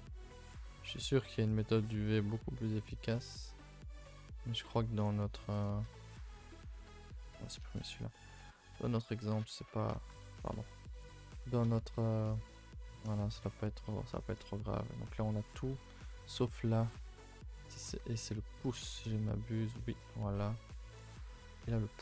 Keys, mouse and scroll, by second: 0.3 shift+click, 0.6-1.5 middle drag, 1.5 alt+shift+click, 2.1 shift+click, 2.3-2.9 middle drag, 2.9 alt+shift+click, 3.1-4.0 middle drag, 4.0 scroll down 1, 4.2-5.6 middle drag, 5.6 right click, 5.8 a, 6.0 a, 7.5 right click, 7.6 a, 7.7 a, 7.9 scroll down 2, 8.1-8.4 middle drag, 8.4 a, 9.4 i, 10.5 ctrl+z, 11.3 a, 12.4 u, 16.4 click, 16.8 a, 16.9 a, 17.5 c, 18.1 middle click, 18.5 a, 18.7 a, 18.8 middle click, 19.1-19.4 scroll up 2, 19.4-21.3 middle drag, 21.3 a, 21.4 a, 21.6-22.0 middle drag.